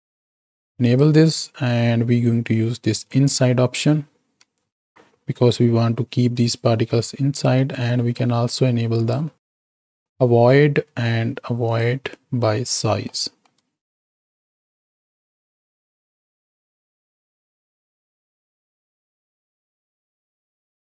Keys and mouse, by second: 0.8 click, 4.7 alt+a, 7.9 middle click, 8.9 click, 11.6 click, 13.1 click, 14.3 shift+Right, 14.5 shift+Left, 15.3 space, 16.0 z, 16.9-17.6 middle drag, 17.6 click, 18.6-20.9 drag.